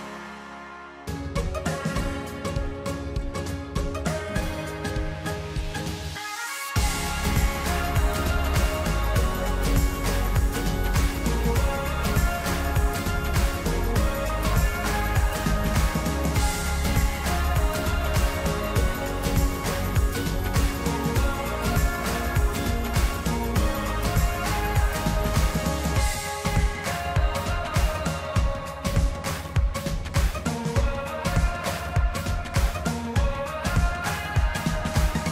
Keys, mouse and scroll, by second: 0.3-0.8 scroll up 13, 1.1 scroll down 1, 1.9 scroll up 1, 2.1-3.7 scroll down 1, 3.7-8.5 middle drag, 8.5-9.1 scroll down 1, 9.1-11.0 middle drag, 11.0-11.7 scroll up 2, 11.7-14.7 middle drag, 21.4-27.4 middle drag, 28.1-31.1 middle drag.